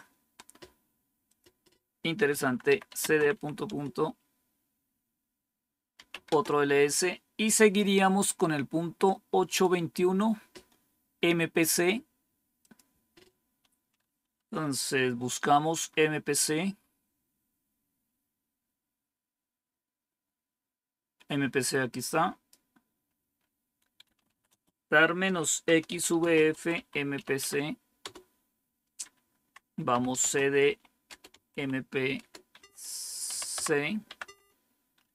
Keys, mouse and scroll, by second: 1.2 click, 2.4-4.1 typing, 5.7-6.4 typing, 9.4 click, 12.6 click, 15.8 scroll up 1, 18.0 scroll down 1, 21.9 click, 22.8-23.4 scroll down 3, 23.8-27.6 typing, 29.9-34.7 typing.